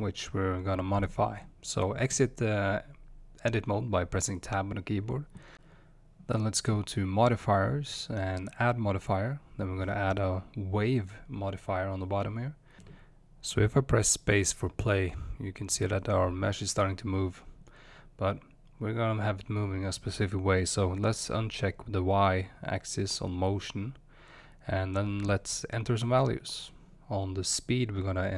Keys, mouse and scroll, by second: 2.7 Tab, 2.7-3.4 middle drag, 3.4 click, 11.9-14.7 drag, 14.7 space, 17.1-21.1 drag, 24.2-28.3 drag.